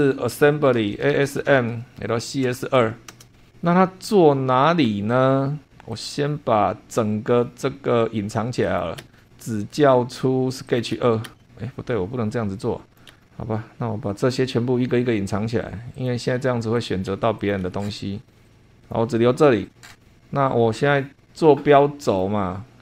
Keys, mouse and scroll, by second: 0.3 Home, 0.9-2.5 typing, 3.1 Return, 5.9 click, 7.0-7.9 scroll up 4, 8.6 click, 9.0 space, 9.2 scroll down 2, 10.7 click, 10.9 space, 11.7-12.2 scroll up 2, 12.6 scroll down 2, 12.9 click, 13.1 space, 14.2 click, 15.9 click, 16.7 click, 17.1 space, 17.4 click, 18.3 click, 18.4 space, 18.5 click, 18.5 space, 18.8 click, 19.3-19.6 scroll up 2, 19.9 shift+click, 22.1 click.